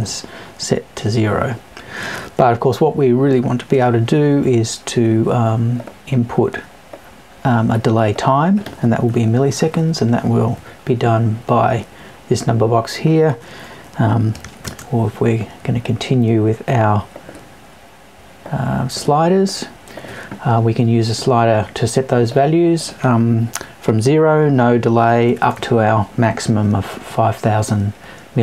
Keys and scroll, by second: 9.0 Left, 10.5 Left.